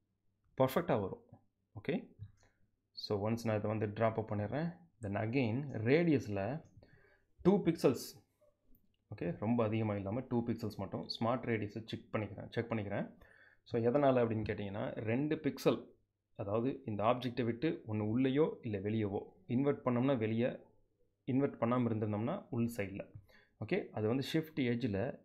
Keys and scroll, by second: 7.4 2.